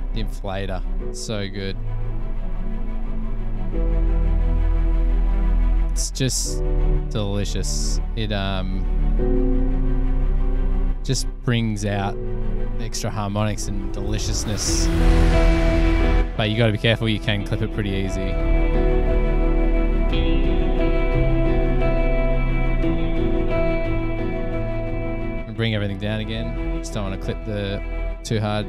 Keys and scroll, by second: 0.1 Return.